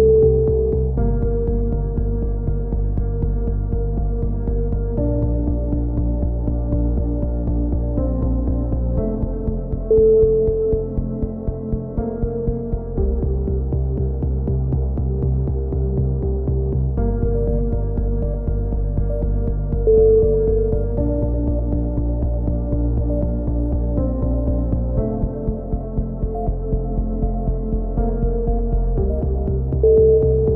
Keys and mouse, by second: 2.8-5.7 middle drag, 5.7 z, 5.9 z, 6.6 Tab, 6.8 z, 8.3 Tab, 8.5 z, 8.7-9.1 drag, 9.2 drag, 9.4 Tab, 9.7-12.7 typing, 10.3 Tab, 10.3-10.9 drag, 11.9 ctrl+r, 13.1-13.5 drag, 13.5 middle click, 14.3-15.9 drag, 15.9-16.3 middle drag, 16.3 ctrl+z, 16.3 drag, 16.7-17.8 drag, 17.6 a, 18.0 z, 18.2 middle drag, 18.9 KP_7, 19.7 drag, 19.7 z, 20.3-21.5 drag, 21.9 a, 23.0 z, 24.6 ctrl+r, 25.3 a, 25.6 ctrl+r, 26.7-27.6 drag, 28.3 alt+m, 28.3-29.3 right drag, 29.3-29.8 drag, 29.8 x, 30.4 a.